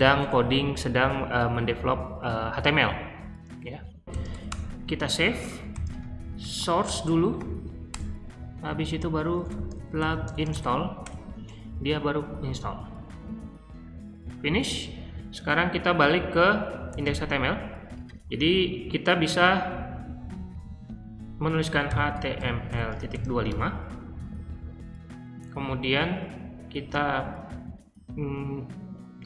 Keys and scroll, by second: 0.0-0.4 typing, 3.4-6.8 typing, 7.3 Up, 7.9 Return, 8.6-10.9 typing, 14.5 q, 16.8-18.3 typing, 21.6-23.9 typing.